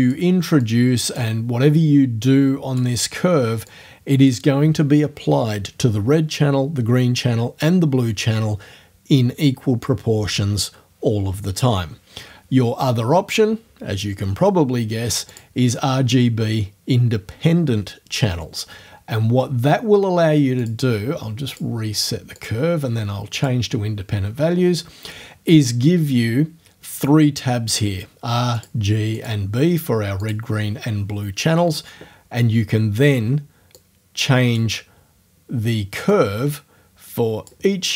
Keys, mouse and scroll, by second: 0.6 click, 2.3 click, 3.0 middle click, 3.7 click, 15.4 click, 20.6 click, 21.6 click, 22.4 click, 23.4 click, 28.6 click, 29.2 click, 30.2 click, 33.8 click, 34.8-36.1 middle drag, 36.1-37.7 drag.